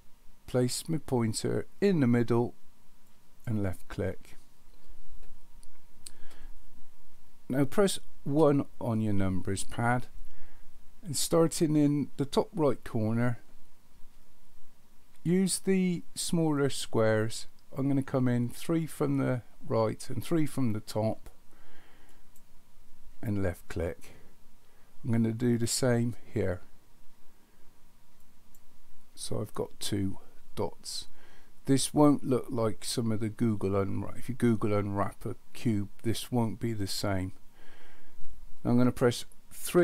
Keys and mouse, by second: 3.1 click, 8.3 KP_1, 22.1 click, 28.2 click, 39.6 KP_3.